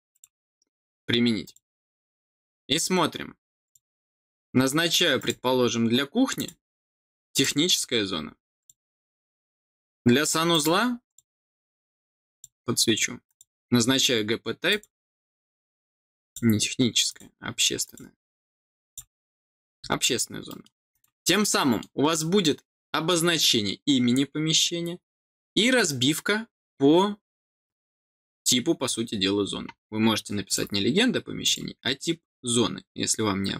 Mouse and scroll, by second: 0.0 click, 1.4 click, 3.6 click, 5.1 click, 6.3 click, 7.3 click, 8.5 click, 10.4 click, 11.0 click, 12.3 click, 13.2 click, 14.6 click, 16.2 click, 17.0 click, 17.8 click, 18.8 click, 20.0 middle click, 20.0-20.4 scroll down 1, 20.8 click, 21.5 middle click, 30.4 click, 31.4 click.